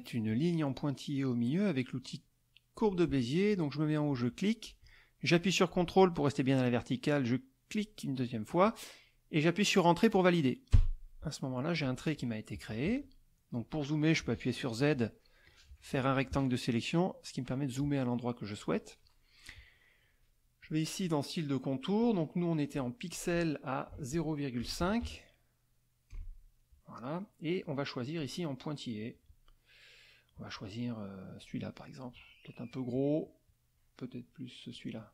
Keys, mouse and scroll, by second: 2.7 click, 4.3 click, 7.7 ctrl+click, 10.7 Return, 11.4 middle click, 12.9 z, 15.4-16.5 drag, 18.0 middle click, 20.6 click, 22.0-23.3 drag, 23.8 click, 24.6 KP_0, 24.8 KP_Decimal, 25.0 KP_5, 26.1 Return, 28.1-31.6 drag, 33.4-34.9 drag.